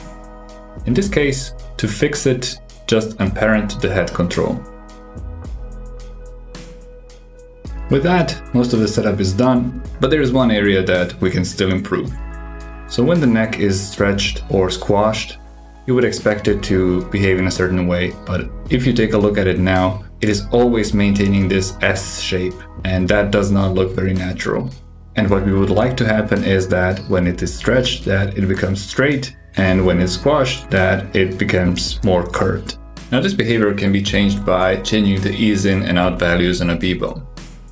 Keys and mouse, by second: 0.2 Tab, 2.1 alt+p, 5.0 Tab, 5.8 click, 6.5 g, 9.1 super+KP_6, 9.2-9.8 ctrl+middle drag, 11.9 click, 12.5 g, 20.0 shift+middle drag, 20.5 g, 27.0 g, 28.4 alt+z, 28.9 click, 30.9 click, 32.7-37.7 drag.